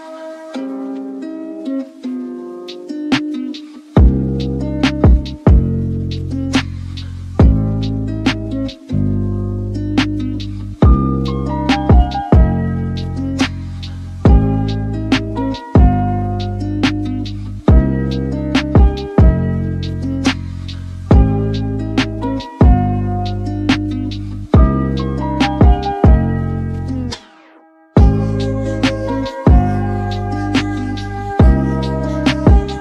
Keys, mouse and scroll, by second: 0.0 ctrl+w, 7.1 click, 9.8-12.9 middle drag, 13.5 click, 19.8 click, 20.9-32.8 middle drag.